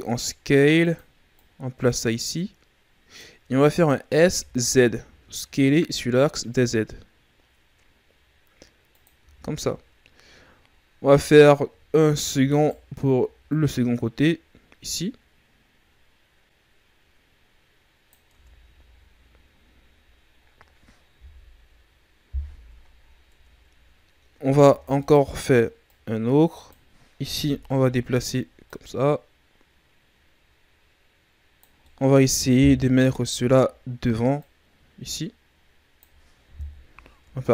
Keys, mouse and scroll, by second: 1.3 click, 4.0 s, 9.1 z, 10.6-12.1 scroll up 2, 12.1 shift+d, 13.4 click, 18.3 Tab, 18.6 a, 18.9-19.6 scroll down 5, 19.6-20.3 scroll down 2, 20.3-21.1 scroll up 5, 21.1 KP_3, 23.0-23.3 scroll up 4, 23.3 Tab, 24.6 shift+d, 25.8 click, 27.3 KP_1, 28.6 click, 31.8 middle click, 32.7 KP_3, 34.3 click, 36.5 KP_1, 37.2 Tab.